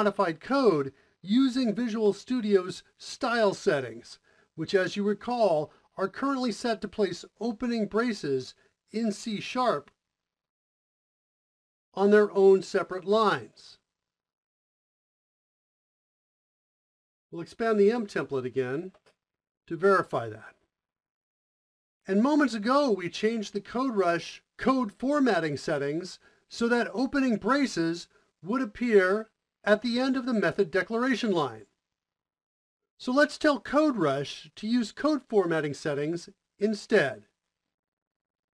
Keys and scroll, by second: 17.5 Return, 18.0 m, 18.7 space, 25.3 typing.